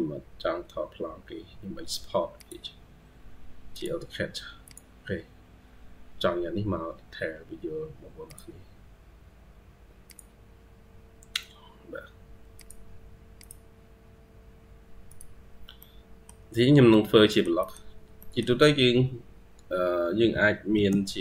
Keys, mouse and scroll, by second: 15.6 middle click, 17.1 middle click, 17.4 middle click, 18.0 middle click, 19.6-20.0 scroll up 1, 20.9-21.2 scroll down 1.